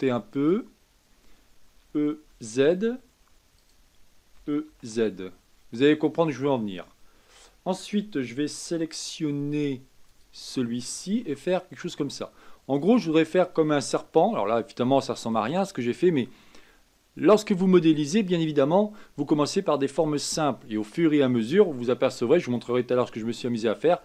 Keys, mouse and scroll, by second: 0.8-1.7 scroll down 2, 1.7 e, 4.3 e, 7.3 a, 10.1 alt+click, 11.2 s, 14.0-17.1 middle drag.